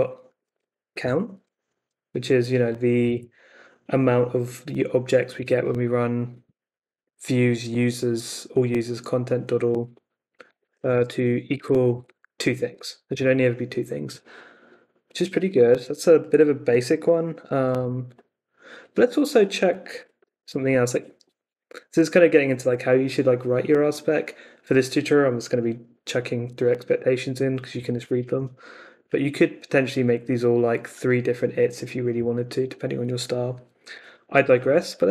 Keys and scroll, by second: 0.0-1.5 typing, 10.3-12.0 typing, 12.6 Escape, 13.0 o, 15.4 Escape, 17.7 Up, 19.9-20.8 typing.